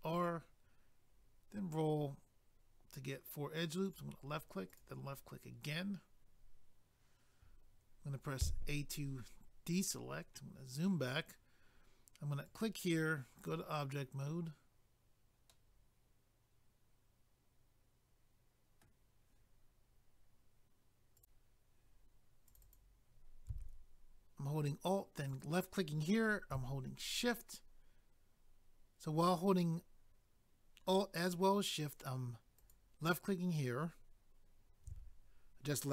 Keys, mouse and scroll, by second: 0.3 scroll up 1, 3.8 click, 3.9 click, 4.7 click, 4.8 click, 8.4 a, 9.9 scroll down 2, 12.4 click, 13.4 click, 15.5 middle click, 21.2 click, 21.2 click, 22.5 click, 22.6 click, 22.8 double click, 25.3 alt+click, 25.4 alt+click.